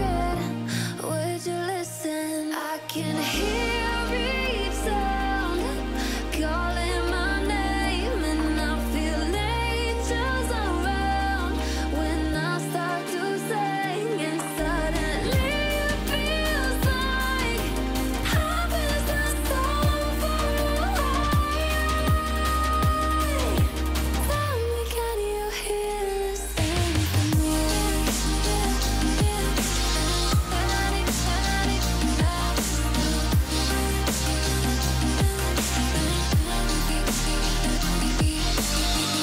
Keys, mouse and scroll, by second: 0.3 alt+click, 0.9-1.3 click, 1.4 alt+scroll up 1, 1.5 click, 2.0 click, 2.1 alt+scroll up 1, 2.2 drag, 3.9 alt+scroll up 1, 4.0 click, 4.3 Down, 4.5 alt+scroll down 1, 4.6 click, 4.8 alt+scroll up 1, 4.9 click, 5.6 alt+scroll down 1, 5.9 click, 7.0 alt+scroll down 1, 7.3 alt+scroll up 1, 7.6 click, 8.0 click, 8.1 ctrl+c, 8.3 alt+scroll up 2, 8.7 ctrl+v, 9.0-9.4 click, 9.7 alt+shift+click, 12.3 alt+click, 12.3 alt+scroll up 1, 12.5 click, 12.7 alt+shift+click, 14.3 scroll up 2, 14.4-17.4 drag, 18.3-20.2 drag, 21.1 drag, 29.1-30.7 alt+shift+click, 31.1 alt+scroll up 1, 31.3 click, 32.7 click, 32.8 click, 33.8 click, 34.5-35.2 click, 35.8 click, 37.0 alt+scroll up 1, 37.4-37.9 click, 39.1 alt+scroll down 1.